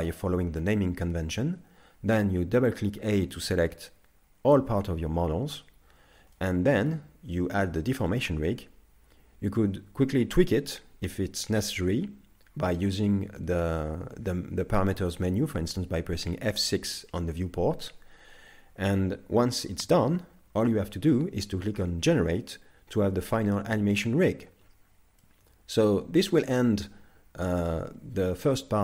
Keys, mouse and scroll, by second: 6.3 middle click, 25.2 middle click, 26.8-28.3 scroll up 1.